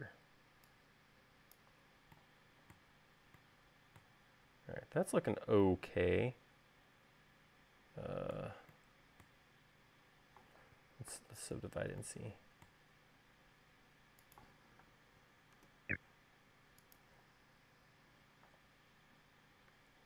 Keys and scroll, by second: 11.7 u, 15.4 space, 16.1 space, 18.1 Escape.